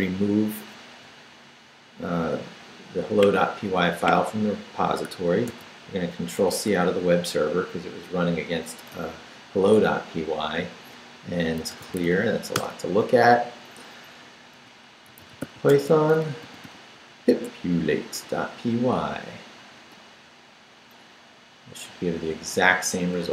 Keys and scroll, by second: 5.5 ctrl+c, 11.4-12.5 typing, 14.5-17.1 typing, 17.4 Tab, 19.8 Return.